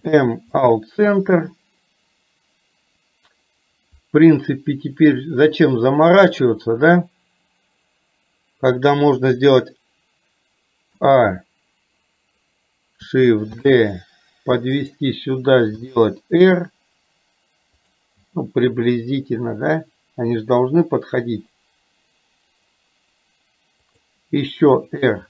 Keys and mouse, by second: 13.7 shift+d, 16.0 r, 18.4 g, 24.7 r.